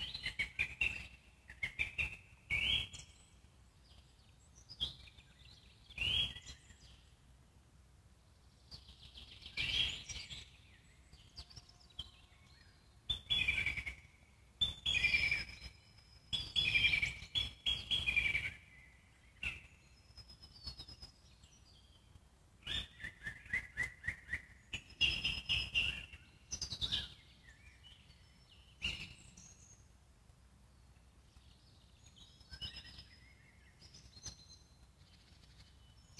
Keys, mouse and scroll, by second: 2.3 click, 3.1 click, 3.9 click, 6.7 ctrl+z, 7.3-14.5 alt+middle drag, 14.5-16.5 drag, 16.5 ctrl+z, 17.2-20.7 alt+middle drag, 20.7 ctrl+click, 21.5 alt+middle click, 22.0-25.1 ctrl+drag, 25.1 alt+middle click, 25.9 ctrl+click, 26.8 ctrl+z, 27.0 ctrl+z, 29.5 shift+f, 32.2-33.2 scroll up 2, 33.2-34.9 ctrl+drag, 34.9-36.1 alt+middle drag.